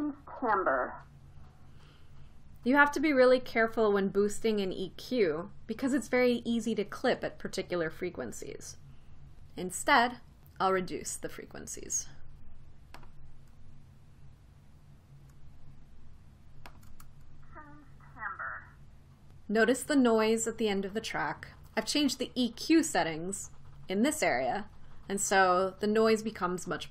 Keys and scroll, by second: 17.7 space.